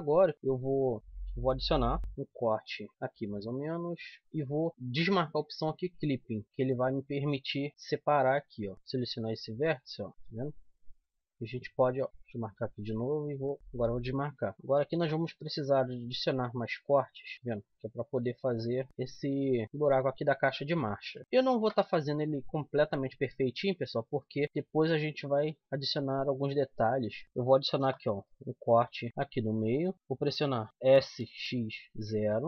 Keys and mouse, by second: 1.0-2.0 middle drag, 2.0 ctrl+r, 4.2-5.5 right drag, 5.5-7.0 drag, 7.7 ctrl+r, 8.7-10.1 drag, 10.1 right click, 10.8 click, 10.9 right click, 12.1 middle click, 12.7-13.7 right drag, 13.7-14.9 drag, 14.9 ctrl+r, 17.5-18.9 drag, 19.4 z, 19.7 z, 20.3 middle click, 21.5 ctrl+r, 24.4-26.1 right drag, 24.8-26.7 drag, 26.8 middle click, 27.7 ctrl+r, 28.2 middle click, 30.9 middle click, 30.9 s.